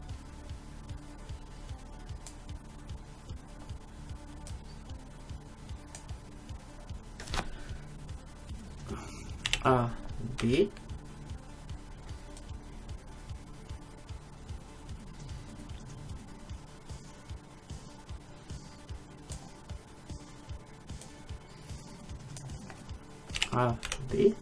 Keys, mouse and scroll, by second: 4.6-6.5 drag, 6.7-8.7 middle drag, 6.7-8.7 scroll up 1, 9.5 a, 10.5 b, 21.1-22.9 drag, 23.4 a, 23.9 b.